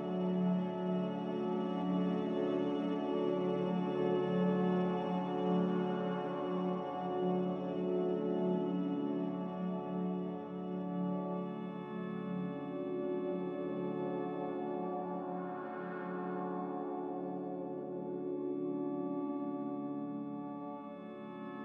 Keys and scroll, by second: 9.0 n, 13.5 b, 15.9 Delete, 19.9 a.